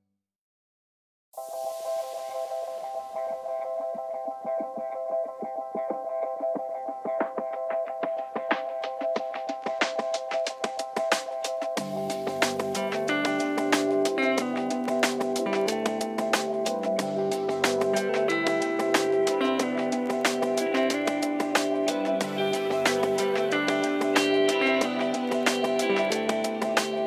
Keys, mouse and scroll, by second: 0.2 ctrl+z, 0.4 ctrl+z, 0.9 ctrl+z, 0.9-2.7 middle drag, 2.3 click, 3.3 click, 4.3 middle click, 5.0 ctrl+z, 5.4 ctrl+z, 5.5 ctrl+z, 5.6 middle click, 6.4 ctrl+z, 6.6 ctrl+z, 6.6 middle click, 7.7-8.4 drag, 8.4 middle click, 8.6 click, 11.9-13.0 middle drag, 13.0 click, 14.0 click, 14.5 middle click, 15.0 click, 16.8 middle click, 17.7 click, 18.5 middle click, 19.6 click, 19.7 middle click, 20.4-22.9 middle drag, 22.6 f, 22.9-23.7 drag, 23.7 ctrl+z, 23.8 ctrl+z, 24.0-24.4 drag, 24.4 middle click, 24.8 click, 26.5 middle click.